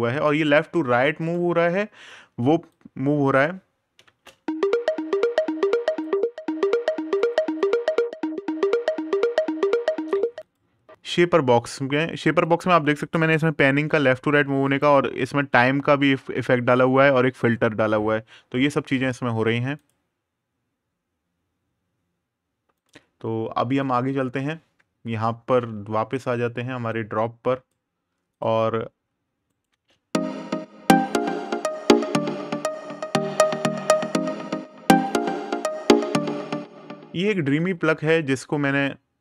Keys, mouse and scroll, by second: 2.5 click, 3.8 space, 5.8 click, 9.9 click, 14.4 click, 15.1 super+KP_Subtract, 16.3 super+KP_Add, 17.1 click, 23.6 click, 28.1 click, 29.2 right click, 29.5 space, 35.9 click.